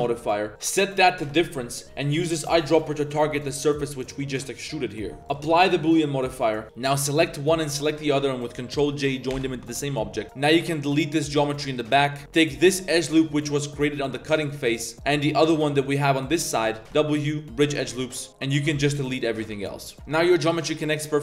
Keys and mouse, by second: 0.5-2.5 drag, 4.2 middle click, 5.2 z, 5.3-6.0 drag, 6.4 middle click, 6.8 click, 7.6 shift+click, 9.3 ctrl+j, 9.7 Tab, 10.0 1, 10.2 alt+z, 10.2 alt+click, 11.1 x, 11.9 drag, 12.1 z, 12.2 click, 12.2 1, 12.5 drag, 12.7 shift+drag, 13.5 ctrl+click, 14.0 z, 14.3 click, 14.6 click, 14.8 z, 15.6 click, 16.2 click, 16.3 middle click, 16.5 middle click, 16.8-19.5 typing, 17.9 click, 19.6-19.9 drag, 19.9 Tab, 20.6 shift+click, 20.9 click.